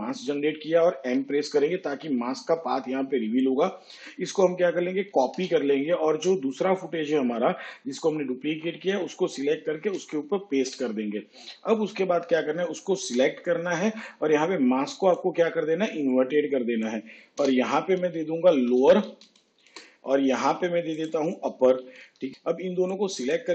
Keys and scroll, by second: 2.0 m, 6.2 ctrl+c, 10.8 ctrl+v, 14.1 m, 18.6 Return, 19.6-20.3 typing, 20.8 Return.